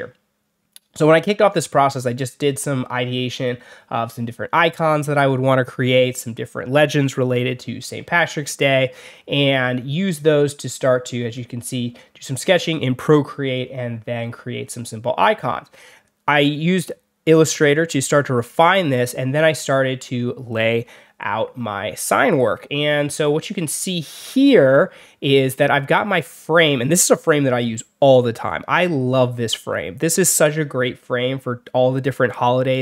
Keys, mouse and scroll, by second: 13.4 alt+middle click, 13.6 alt+scroll up 2, 14.5 alt+scroll down 2, 14.6 alt+middle drag, 15.7 alt+scroll down 2, 17.3 alt+scroll up 2, 17.9-18.3 alt+scroll up 4, 18.3 alt+scroll down 2, 18.7 alt+scroll up 2, 19.7 alt+scroll down 2, 23.6 alt+scroll down 2, 24.1 alt+scroll up 2.